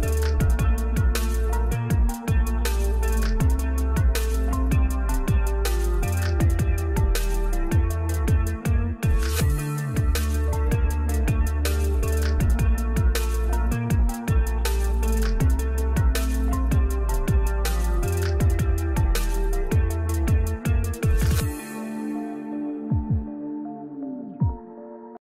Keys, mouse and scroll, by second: 9.7 ctrl+u, 11.3-17.6 drag, 19.1-19.6 alt+scroll down 1, 20.3 alt+scroll up 1, 22.2 click.